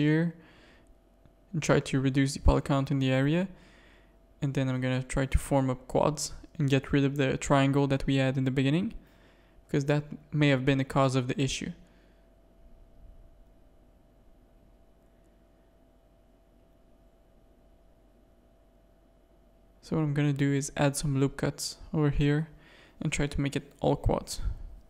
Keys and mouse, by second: 0.2 ctrl+z, 0.7 middle click, 1.0 z, 1.4 a, 1.7 click, 2.3 middle click, 3.8 f, 4.2 a, 4.4 click, 4.7 middle click, 6.6 shift+click, 7.2 f, 7.5 a, 7.9 middle click, 13.6-14.8 middle drag, 14.9 ctrl+z, 15.1 ctrl+z, 15.5 ctrl+z, 15.9 ctrl+z, 16.3 ctrl+z, 17.5 ctrl+z, 17.7 ctrl+z, 18.1 a, 18.3 middle click, 19.4 click, 19.9 f, 20.3 a, 21.0 ctrl+r, 22.2 a, 22.6 middle click, 23.4 click, 24.0 middle click.